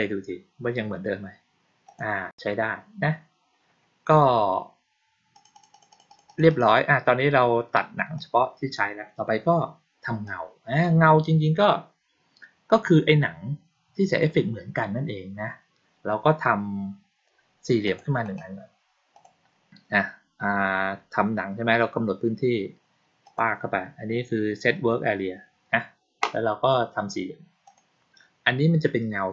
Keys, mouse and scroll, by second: 1.8 click, 5.2 click, 5.4 click, 5.6 click, 5.8 click, 6.0 click, 6.2 click, 6.4 click, 8.1-8.7 drag, 10.2 click, 17.8 click, 18.1 right click, 19.0 click, 23.2 click, 27.6 click.